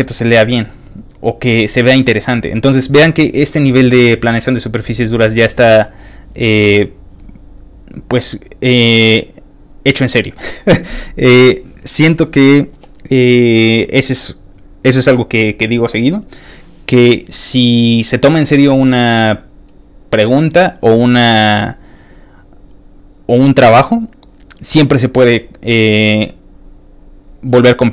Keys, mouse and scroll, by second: 1.1 ctrl+click, 2.2 ctrl+click, 3.6 ctrl+click, 4.3 ctrl+click, 5.2 ctrl+click, 6.2 ctrl+click, 7.4 ctrl+click, 8.6 ctrl+click, 9.1 ctrl+click, 21.9 ctrl+click, 22.8 ctrl+click, 23.7 ctrl+click, 26.5 ctrl+click.